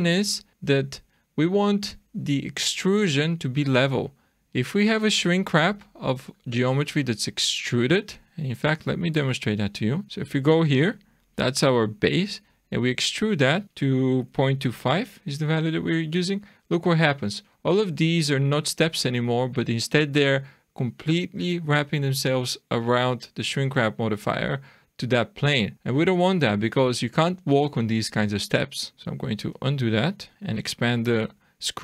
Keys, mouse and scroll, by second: 5.0 click, 5.6 click, 6.3 click, 7.1-7.8 scroll down 3, 9.2 click, 10.0 Tab, 10.0-10.4 scroll down 1, 11.5-12.3 scroll up 1, 12.5 e, 16.4 shift+middle click, 17.5-18.0 scroll up 4, 24.4-24.7 scroll down 3, 25.7-26.1 scroll up 3, 28.9 scroll down 2, 29.0 ctrl+z, 30.2-30.7 scroll down 3, 30.3 Tab, 30.3 click, 30.7 shift+middle click.